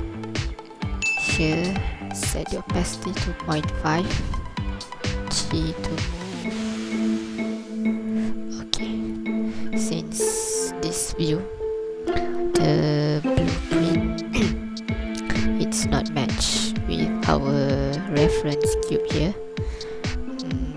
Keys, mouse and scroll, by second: 4.8 ctrl+click, 4.8 scroll down 1, 5.3 g, 8.1 click, 8.9 ctrl+click, 10.8 scroll down 2, 11.2 scroll up 2, 16.2 scroll up 2, 16.6 scroll down 1, 18.0 right click, 18.0-18.9 scroll down 1.